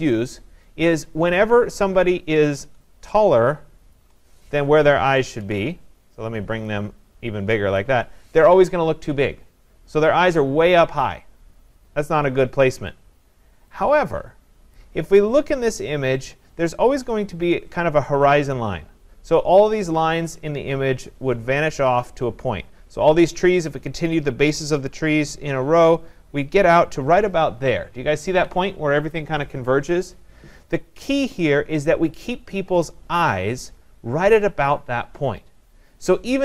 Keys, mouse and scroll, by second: 0.8 click, 4.0 shift+click, 5.4 ctrl+z, 7.7 click, 11.3 click, 14.7-19.8 drag.